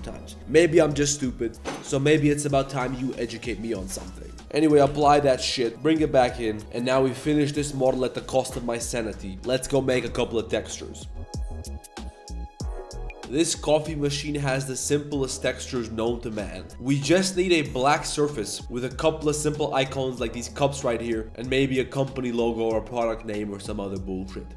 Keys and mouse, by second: 4.4 click, 4.4 shift+s, 5.5 ctrl+a, 5.7 ctrl+shift+g, 6.6 KP_7, 6.6 Tab, 6.6 ctrl+s, 6.6-7.0 drag, 6.6 a, 8.0-8.3 drag, 8.5 click.